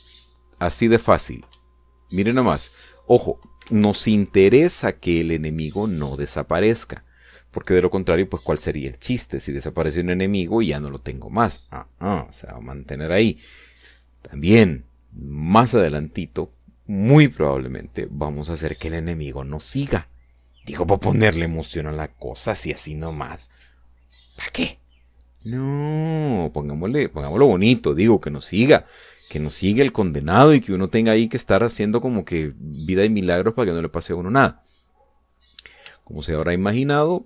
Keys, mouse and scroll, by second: 2.3 Up, 4.5 Escape, 32.5-32.9 scroll down 2, 33.2-36.0 middle drag, 36.2-36.5 scroll up 2, 36.9 shift+middle click.